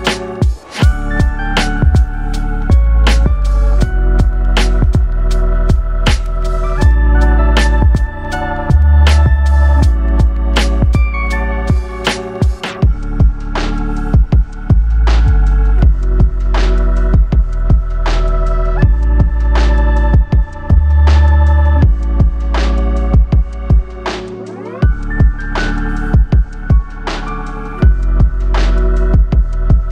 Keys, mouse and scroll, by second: 1.4 click, 2.7-6.3 drag, 11.8-12.9 scroll down 5, 12.9-15.1 drag, 15.3-16.6 scroll down 3, 16.6-18.8 drag, 20.8-21.9 scroll up 11, 23.0-25.6 drag.